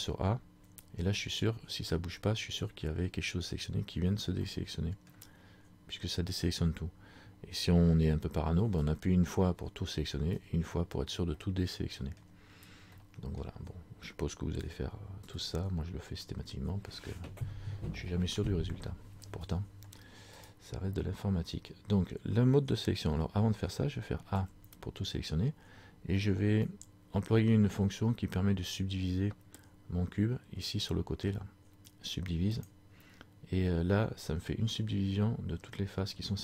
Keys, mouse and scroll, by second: 4.5 middle click, 11.5 middle click, 13.0 middle click, 14.7 a, 20.4 right click, 32.6 click.